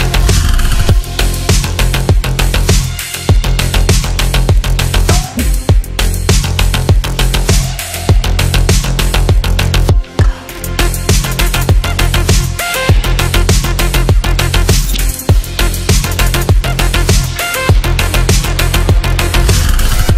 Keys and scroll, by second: 19.8 F3.